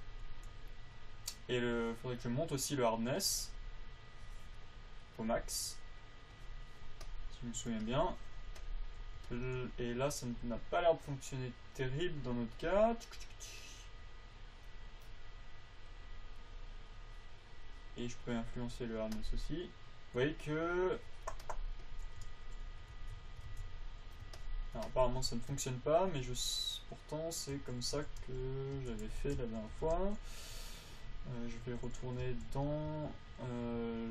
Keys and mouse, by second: 7.6 click, 7.7 right click, 9.2-13.1 middle drag, 13.1-16.4 drag, 19.5-22.7 right drag, 22.7 alt+a, 22.7 alt+z, 23.3 alt+z, 23.9 alt+a, 27.9-30.4 typing, 31.3-33.3 drag, 32.0 t, 32.6 n, 33.3 n.